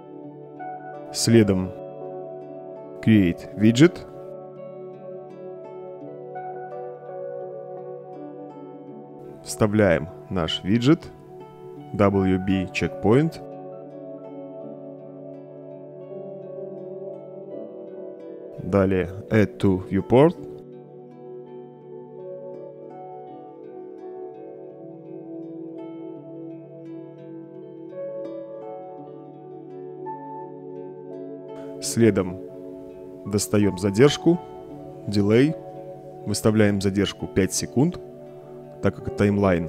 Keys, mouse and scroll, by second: 1.5-2.0 drag, 2.5-5.6 typing, 6.2 Return, 7.5-8.8 drag, 9.3 click, 10.0 scroll down 1, 15.7 click, 17.1-17.6 right drag, 18.8-19.2 drag, 19.6-23.8 typing, 24.6-25.6 drag, 27.8-30.3 right drag, 32.4-32.8 drag, 33.4-35.0 typing, 35.8-36.4 drag, 36.9 click, 37.5 click, 38.9 Return.